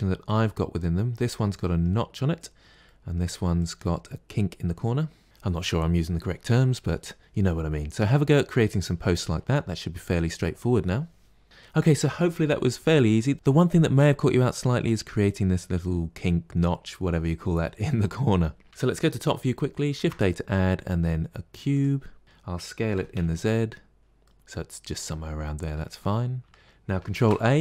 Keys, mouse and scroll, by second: 0.1 click, 1.3-3.4 middle drag, 3.4 click, 18.6 KP_7, 19.8 shift+a, 22.2-22.8 middle drag, 22.8 s, 24.1-25.8 middle drag, 25.8-26.4 scroll up 4, 26.4-27.0 shift+middle drag, 27.0 ctrl+a.